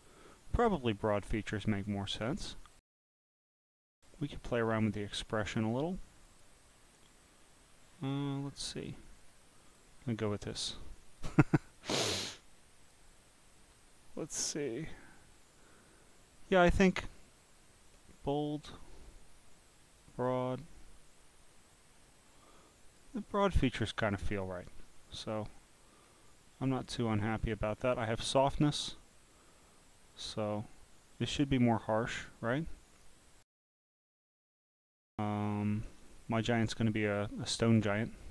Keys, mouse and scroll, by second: 0.6 click, 1.4 click, 6.3 click, 9.7 click, 10.3 click, 12.8 click, 18.1 click, 20.2 click, 21.7 click, 23.5 click, 25.5-26.0 scroll down 2, 27.3-31.4 drag, 31.8-33.1 drag, 37.6 click.